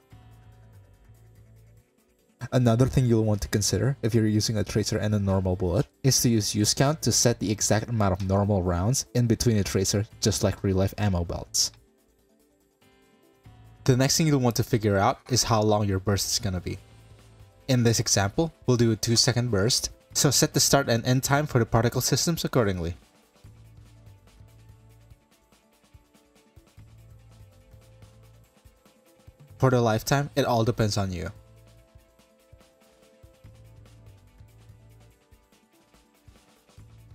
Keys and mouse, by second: 1.5 click, 4.8 click, 5.2 click, 7.6 click, 8.1 click, 9.9-10.3 shift+middle drag, 11.1-11.7 drag, 12.9 click, 13.5 click, 33.8 BackSpace.